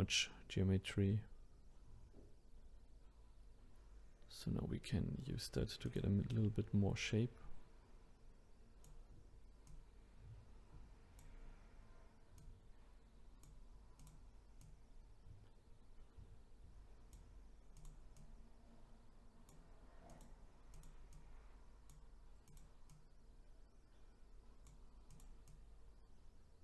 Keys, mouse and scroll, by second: 5.8 click, 6.3-9.3 drag, 9.6 click, 12.4 click, 14.0 click, 14.6 click, 17.8 click, 20.1 click, 20.7 click, 22.5 click, 22.9 click, 25.1-26.6 drag.